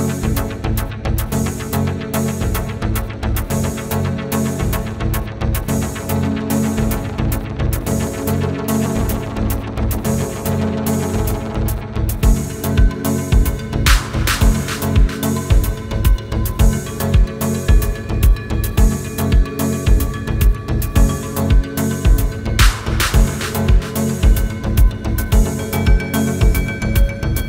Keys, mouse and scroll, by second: 1.7 click, 4.0 click, 15.5 Down, 16.1 click, 27.2-27.4 scroll down 1.